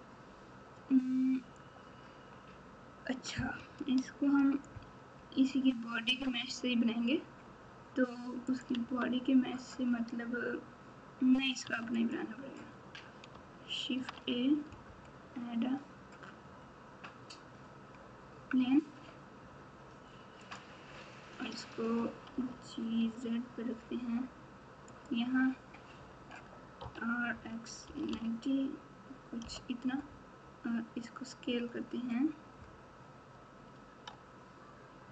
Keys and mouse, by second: 8.7 Tab, 11.6 Tab, 12.0 click, 13.9 shift+a, 22.3 g, 26.8 r, 33.7 s.